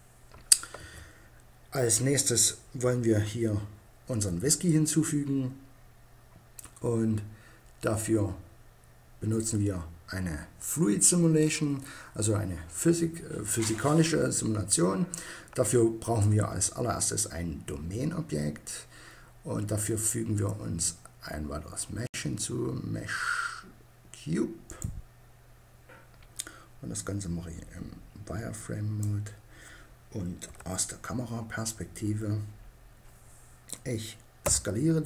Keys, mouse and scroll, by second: 0.0 Escape, 2.0 KP_1, 8.9-11.3 drag, 19.2-20.9 drag, 26.3-27.5 drag, 27.9 middle click, 29.8 KP_0, 33.8 s.